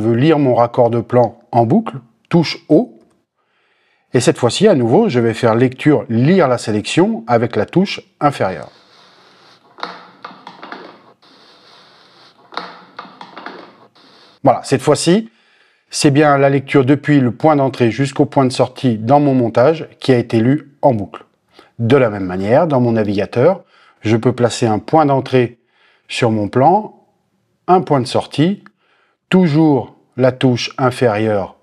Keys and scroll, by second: 3.2 o, 8.3 <, 28.8 o.